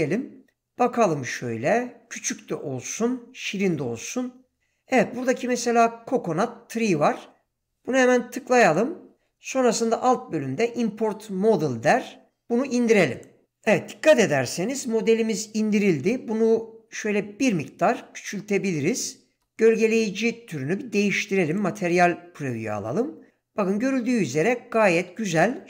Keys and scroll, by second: 17.5 s.